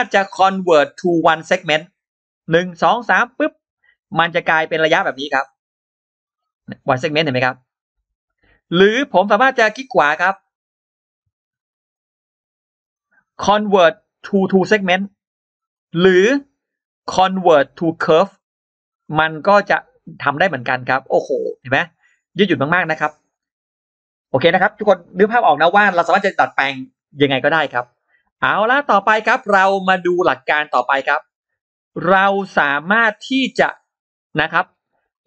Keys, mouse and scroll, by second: 3.7 middle click, 3.7-4.0 scroll down 2, 4.1 click, 4.6 click, 5.0 click, 5.4 click, 5.5 click, 5.9-9.4 drag, 9.4 right click, 10.3 click, 10.7 click, 11.4 click, 11.8 click, 12.4 right click, 14.5 click, 15.9 right click, 18.0 click, 18.9 click, 19.6 click, 20.0 click, 20.3 click, 20.7 click, 21.6 click, 22.5 click, 22.7-23.1 scroll down 1, 23.6 scroll up 1, 27.1-27.4 scroll down 1, 27.8 click, 27.8 e, 28.6 e, 29.0-30.1 drag, 30.6 click, 31.9 click, 32.5-32.8 scroll up 1, 33.0 click, 33.9 click, 34.5-34.8 scroll down 1, 34.8 space, 35.0-35.2 scroll up 2.